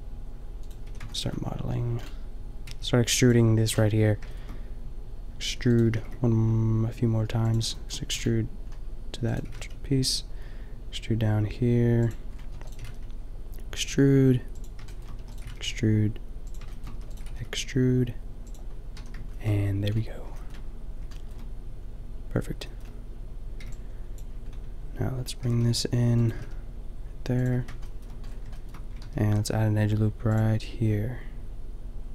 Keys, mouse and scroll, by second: 0.8 a, 1.2 middle click, 2.1 middle click, 2.6 b, 5.6 e, 5.9 g, 9.2 e, 9.4 g, 12.5 e, 12.8 g, 15.2 e, 15.4 g, 16.9 e, 17.2 g, 19.0 a, 23.6 b, 25.3 g, 26.3 g, 27.5 a, 29.0 ctrl+r.